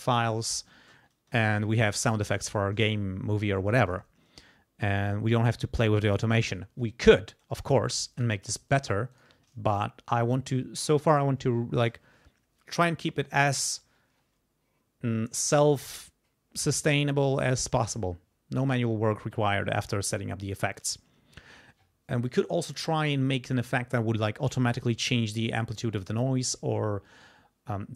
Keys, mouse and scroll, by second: 0.1 q, 1.3 Return, 8.1 shift+right click, 8.7 shift+right click, 9.1 shift+right click.